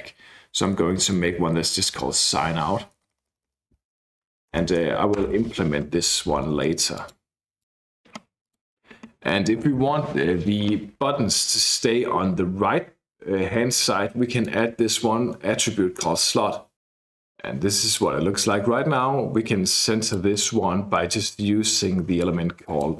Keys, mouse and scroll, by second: 0.7-2.7 typing, 3.0 Left, 3.1 Left, 3.3 Left, 3.5 Left, 4.5 alt+Return, 5.2 Return, 6.9 click, 7.6 click, 8.4 click, 14.3 click, 17.0-18.2 drag, 19.7-20.8 drag, 21.2 click, 21.8 click, 22.7 click.